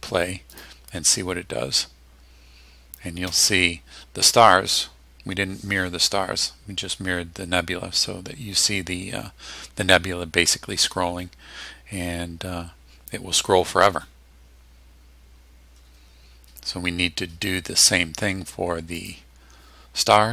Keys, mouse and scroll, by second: 0.5 click, 19.0 click.